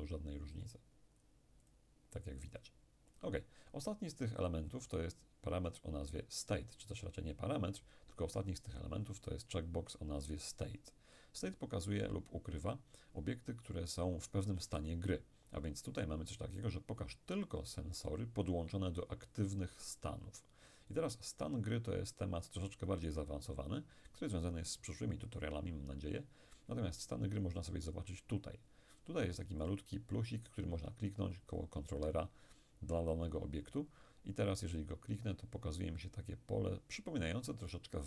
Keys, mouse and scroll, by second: 0.7-4.2 drag, 27.9 click, 29.7 click, 34.8 click.